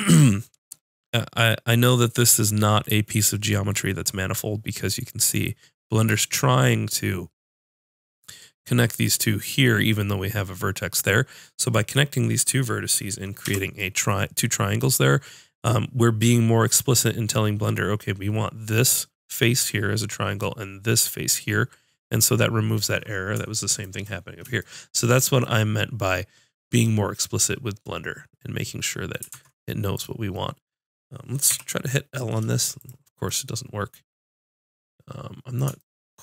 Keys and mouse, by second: 13.5 j, 23.8 middle click, 29.3 ctrl+Tab, 31.5 l, 32.9-34.7 drag.